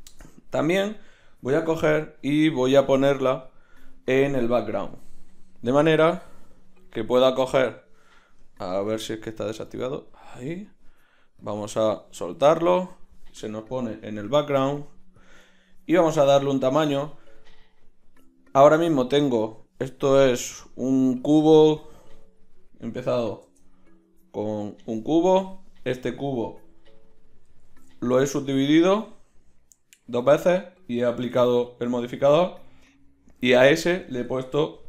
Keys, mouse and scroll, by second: 1.6 n, 15.2-17.0 middle drag, 20.4-21.9 middle drag, 21.9 z, 23.4 shift+a, 27.6 ctrl+shift+q, 32.6 z.